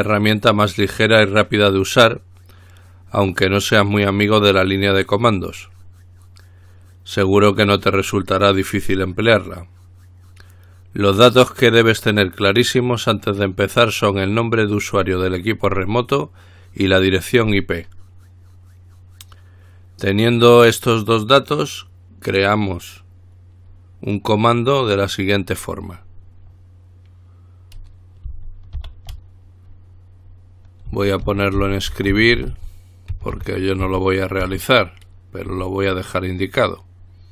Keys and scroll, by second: 29.0 ctrl+alt+t, 30.8-34.6 typing, 35.7 typing.